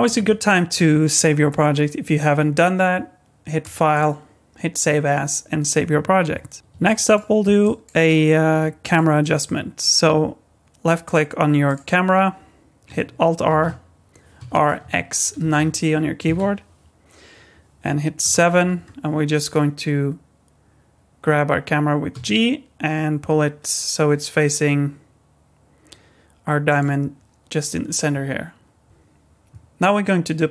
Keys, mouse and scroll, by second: 3.6 click, 3.9 click, 6.8 middle click, 7.6 shift+middle click, 8.8 click, 11.0 click, 11.6 click, 13.5 alt+r, 14.4 r, 18.2 KP_7, 22.1 g, 28.8 click, 28.8 right click.